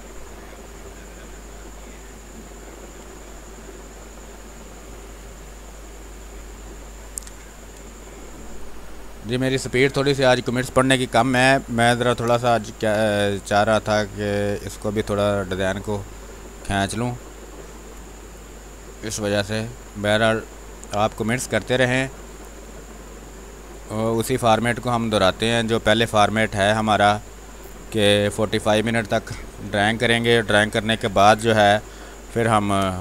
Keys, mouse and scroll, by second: 3.0 shift+space, 3.3 ctrl+click, 5.3 r, 5.4-7.3 drag, 7.3 b, 8.1 click, 8.3 space, 8.6 ctrl+click, 11.5 click, 12.0 b, 12.2 space, 12.5 click, 12.7 space, 13.8-17.3 drag, 17.3 space, 18.8-20.5 drag, 20.5 space, 20.8 click, 21.1 space, 22.4-27.9 drag, 27.9 space, 28.2 click, 28.4 space, 31.3 click, 31.5-33.0 typing, 31.9 click, 32.9 click.